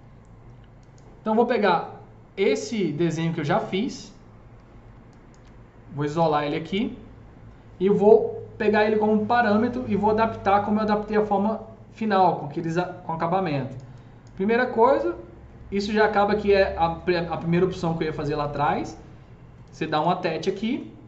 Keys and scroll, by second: 6.0 alt+q.